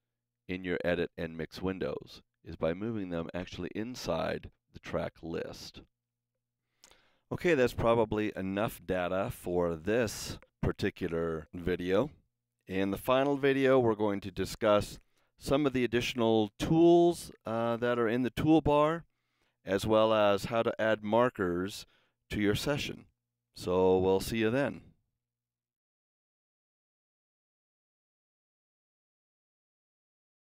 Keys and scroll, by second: 25.4 super+s.